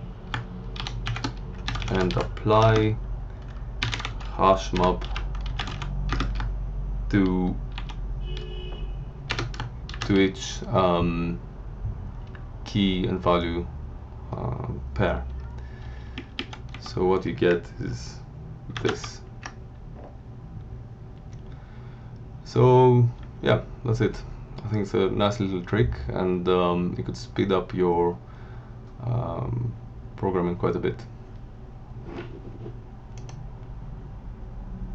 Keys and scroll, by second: 0.7-3.7 typing, 5.2-6.2 typing, 7.7 shift+3, 9.3 BackSpace, 9.9 shift+5, 15.2 Down, 16.7 Left, 18.7 ctrl+c, 18.9 ctrl+w, 23.1 Down.